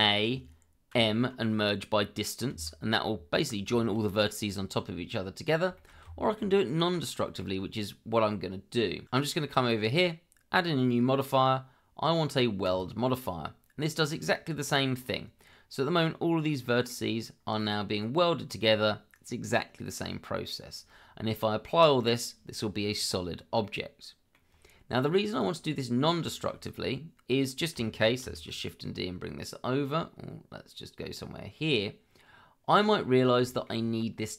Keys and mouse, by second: 0.9 m, 3.7 shift+middle click, 5.8 shift+middle click, 6.0 Tab, 7.0-7.4 middle drag, 9.0 click, 10.7 shift+a, 16.5-16.9 middle drag, 19.9-20.4 middle drag, 23.6-24.3 middle drag, 25.3 click, 26.2 shift+middle drag, 28.2 shift+d, 33.4 shift+middle drag.